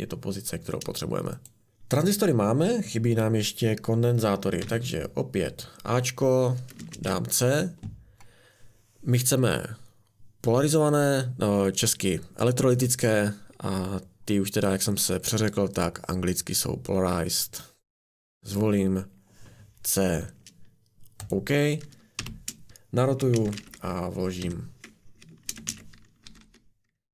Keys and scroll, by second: 1.6 BackSpace, 4.6 a, 6.9 c, 22.2 r, 22.7 r, 23.3 ctrl+c, 23.6 v, 24.4 Escape, 25.5 ctrl+c, 25.7 ctrl+v, 26.2 r, 26.4 r.